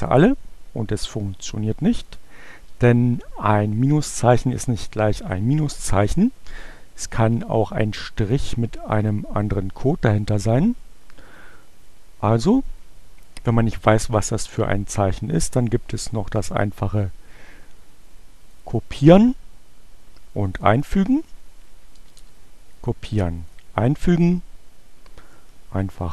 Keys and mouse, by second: 1.3-2.4 drag, 6.4-9.2 drag, 14.5-16.8 right drag, 18.5 click, 20.4 click, 21.8 BackSpace, 22.5 right click, 23.3 click, 25.9 click.